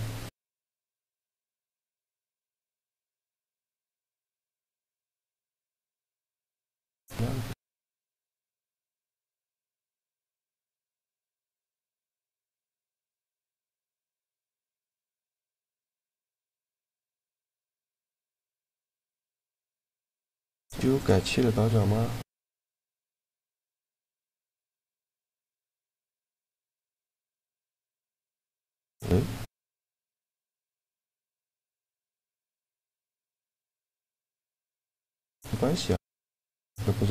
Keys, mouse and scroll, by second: 0.4 click, 1.2 a, 1.4-3.2 right drag, 2.3 shift+g, 10.3-11.6 drag, 11.2 right click, 11.6 shift+g, 12.2 right click, 14.0 click, 14.7 shift+g, 15.7 right click, 17.1-18.8 drag, 18.1-19.8 right drag, 18.8 shift+g, 22.3 Tab, 23.0-24.9 drag, 31.2 middle click, 31.5 Tab, 33.2 right click, 33.5-35.1 drag, 33.6 shift+g, 36.9 Tab.